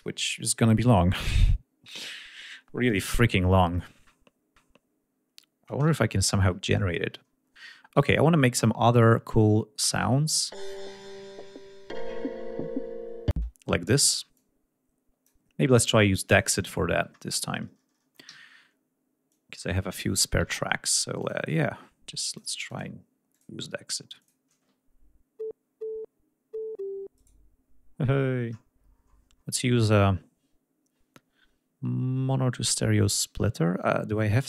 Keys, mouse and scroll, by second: 4.3-4.8 scroll down 2, 6.2 ctrl+scroll down 2, 7.3-7.6 scroll down 2, 8.5-9.3 scroll down 4, 9.3-9.7 scroll up 2, 9.7 scroll down 2, 10.4 click, 10.6 space, 11.0-11.3 scroll down 2, 11.4 scroll up 2, 12.0 scroll up 2, 12.5 scroll down 2, 13.4 space, 14.4 click, 16.1 click, 16.9 ctrl+scroll up 2, 18.3 d, 19.3 click, 20.2 ctrl+scroll up 2, 21.2 click, 22.3 click, 22.7 click, 23.4 click, 24.2 click, 27.2 right click, 28.5-29.0 scroll down 2, 29.0 scroll down 1.